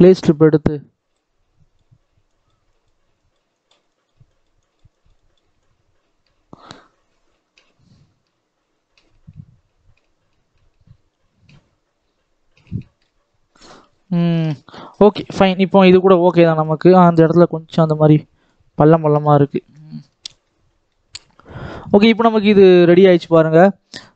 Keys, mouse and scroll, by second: 0.0 shift+middle click, 0.8-8.5 drag, 13.1-13.7 scroll down 6, 13.7-15.2 scroll up 1, 15.9-16.5 scroll down 6, 16.5-17.3 scroll up 7, 17.4-18.7 shift+drag, 18.7-20.7 scroll down 2, 20.7-21.7 right drag, 20.7 middle click, 21.3 middle click, 21.7-22.4 scroll up 1, 23.1 click, 23.2 scroll down 1, 23.5 scroll up 2, 23.7-24.1 scroll down 4, 24.1 scroll up 1.